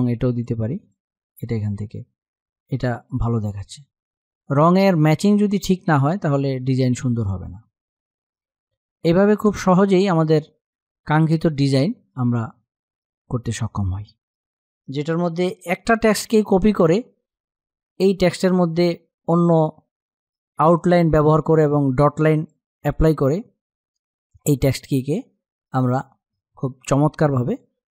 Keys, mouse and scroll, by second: 8.9 click, 11.3 click, 15.5 click, 15.8 -, 22.1 click, 26.0 space, 26.1 click, 26.5 space.